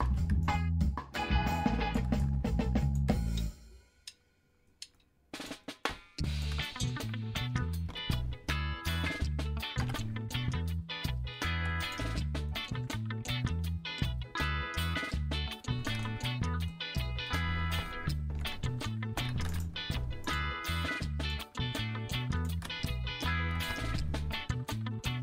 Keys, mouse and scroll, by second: 0.0 alt+e, 1.9 middle click, 2.2 click, 3.7 middle click, 4.7 middle click, 5.4 middle click, 5.6 middle click, 6.4 shift+middle click, 6.6 middle click, 7.9 g, 8.9 y, 9.8 x, 11.3 click, 11.8 click, 12.5 shift+click, 12.9-15.5 drag, 15.7 shift+middle click, 16.0 middle click, 16.7 middle click, 17.8 Tab, 18.3 Tab, 19.2 1, 19.6 middle click, 20.2 shift+click, 23.3 g, 23.7 g.